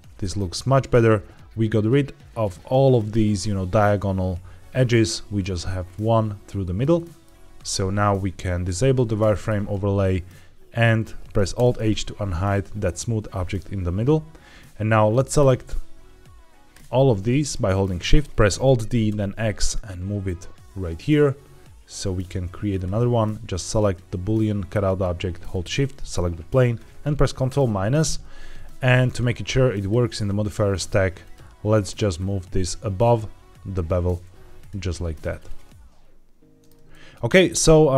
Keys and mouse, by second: 0.1 shift+middle drag, 0.4-0.8 middle drag, 6.5 shift+middle drag, 6.8 middle click, 9.2 shift+middle drag, 11.4 alt+h, 12.4 click, 16.6 shift+click, 17.3-17.7 shift+middle drag, 17.9 middle click, 18.2 Escape, 18.2 ctrl+z, 18.4 alt+d, 19.0 x, 22.6-23.8 drag, 25.4 shift+click, 27.4 ctrl+KP_Subtract, 29.6 click, 30.3 click, 31.1 click, 32.0-33.1 drag, 34.5 click, 35.1-36.5 middle drag, 36.8 shift+middle drag, 37.3 middle click.